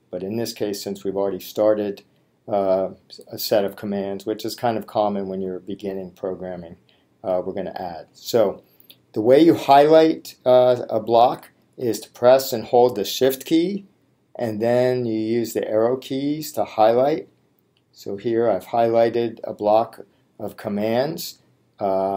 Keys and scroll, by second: 17.2 shift+Up.